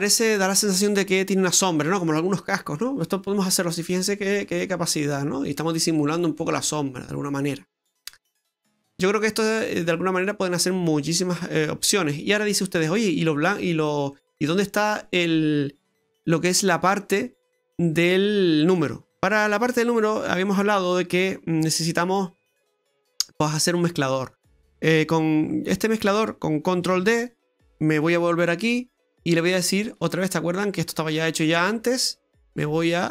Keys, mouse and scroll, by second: 0.7-1.4 scroll up 3, 1.5 middle click, 1.9-2.4 scroll down 5, 2.5 middle click, 3.3-3.7 scroll up 4, 3.8 middle click, 4.4 middle click, 9.5-9.8 scroll down 2, 9.8 middle click, 11.0 middle click, 13.6-14.1 scroll down 2, 14.1 middle click, 18.8-20.0 scroll down 19, 20.0 middle click, 21.8 click, 23.0 click, 26.9 shift+d, 28.4 middle click, 29.9 click, 31.9 click.